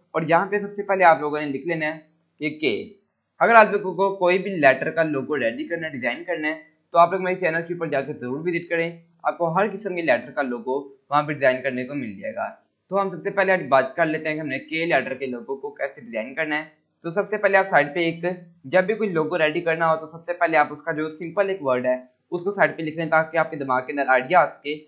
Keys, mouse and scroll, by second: 2.5 click, 4.6 k, 5.7 click, 12.1 click, 13.8-14.4 shift+drag, 17.9-18.6 shift+click.